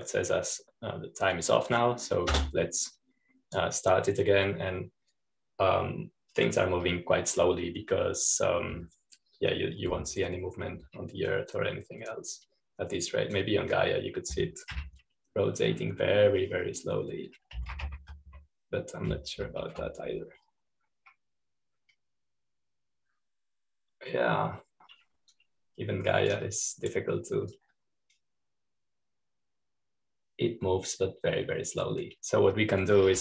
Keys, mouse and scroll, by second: 13.5-17.9 drag, 17.9 f, 19.2-20.4 typing, 27.2-33.2 drag.